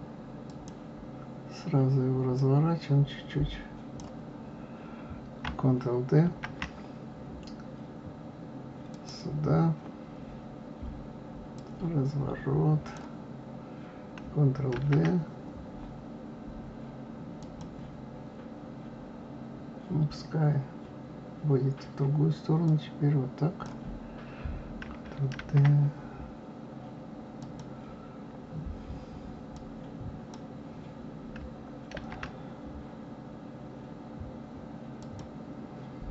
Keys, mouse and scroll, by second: 2.4-5.4 drag, 6.3 shift+d, 11.5-14.5 drag, 14.8 shift+d, 22.6-25.4 drag, 25.4 shift+d, 29.5-31.9 drag, 31.9 shift+d.